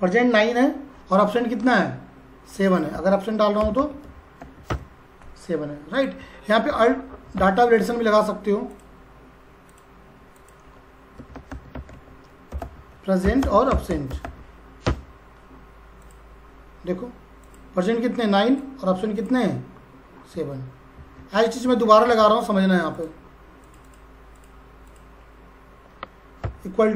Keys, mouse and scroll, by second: 2.7 click, 2.9-4.9 typing, 5.9 click, 7.0-7.4 typing, 8.7 click, 10.9-14.7 typing, 14.9 Return, 16.0 click, 20.9 ctrl+c, 21.4 click, 22.0 ctrl+v, 22.9 click, 23.7 click, 26.4 =.